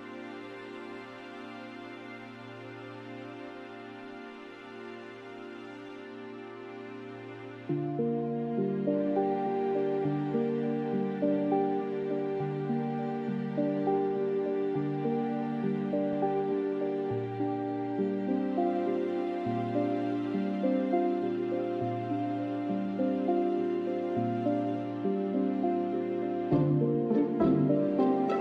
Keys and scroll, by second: 0.0-5.3 typing, 6.9 typing, 8.1-14.9 typing, 27.2 typing.